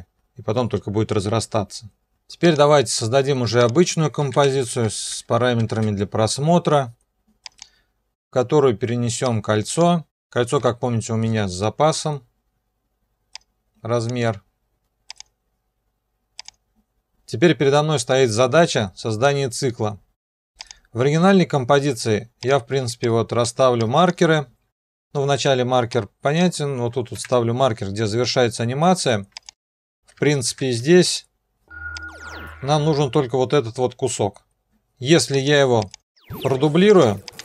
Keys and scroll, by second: 4.0-6.1 typing, 10.6 ,, 11.2 ,, 27.1 *, 30.5 shift+*, 31.5 alt+].